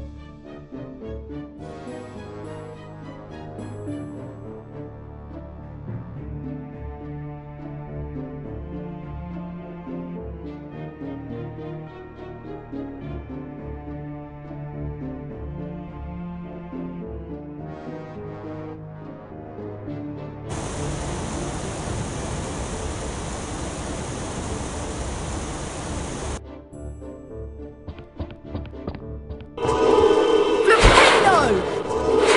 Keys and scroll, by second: 3.8-5.4 typing, 10.9-12.4 typing, 20.4 F4, 24.9-26.9 typing, 29.5-32.3 typing.